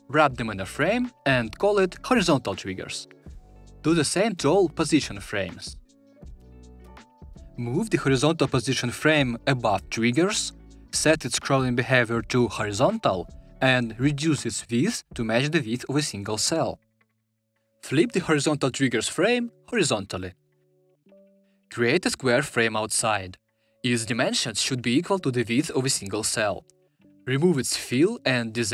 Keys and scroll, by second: 0.8 ctrl+alt+super+g, 19.5 shift+h.